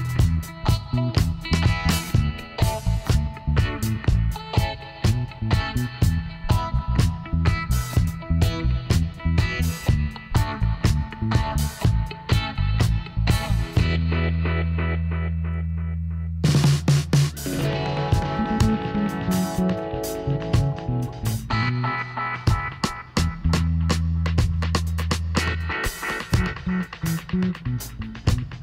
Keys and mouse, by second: 0.9 ctrl+r, 3.8-5.5 drag, 4.3-6.4 right drag, 5.9 alt+m, 7.8-9.5 right drag, 8.7 z, 9.5-12.8 drag, 12.4 ctrl+r, 15.6-17.3 right drag, 16.5 g, 18.3-20.1 middle drag, 20.0 ctrl+r, 22.5-24.9 drag, 24.9-27.8 middle drag, 24.9 s, 27.8 ctrl+r.